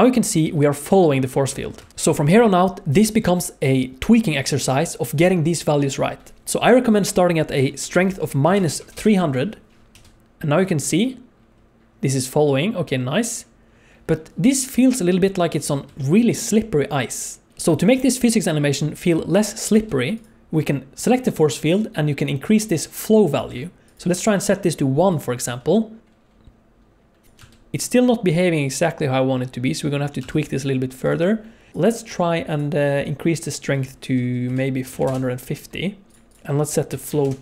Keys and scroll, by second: 1.8 space, 8.7 0, 9.9 space, 17.5 space, 19.7 space, 25.4 space, 25.6 space, 27.2 shift+space, 30.2 space.